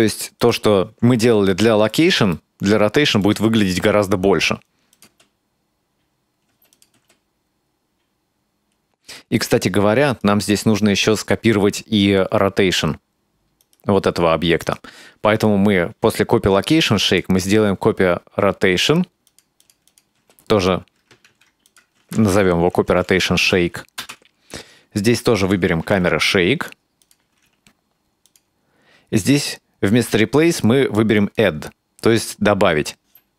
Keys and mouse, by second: 0.4 click, 1.6 shift+middle click, 2.4 ctrl+middle click, 5.0 click, 5.1 space, 6.5 space, 6.8 click, 7.0 space, 9.1 space, 10.1 right click, 13.6 right click, 14.7 right click, 17.2-19.5 drag, 19.6 click, 19.9-24.5 drag, 25.5-27.2 drag, 28.3-31.5 drag, 33.0 space.